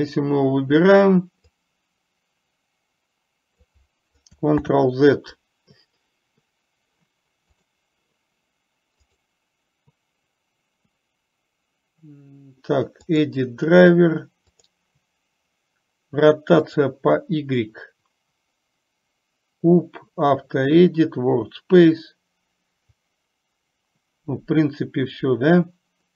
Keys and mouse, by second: 0.4 click, 2.0-4.0 drag, 5.0 ctrl+z.